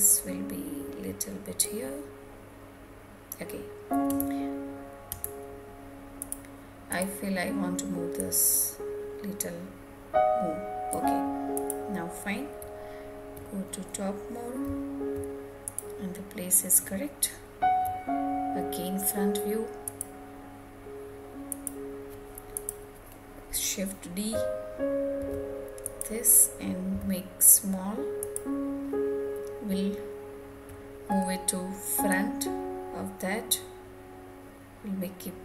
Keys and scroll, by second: 3.6 Tab.